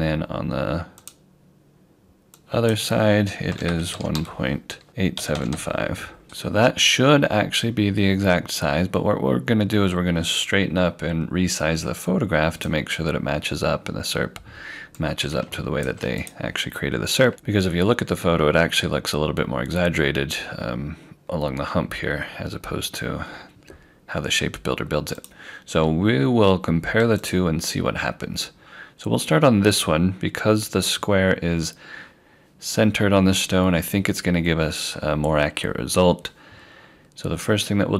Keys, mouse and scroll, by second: 1.0 click, 3.5 1, 4.1 5, 4.9 BackSpace, 5.2 8, 12.6 click, 25.2 click, 30.8 scroll up 1, 32.8 scroll down 1.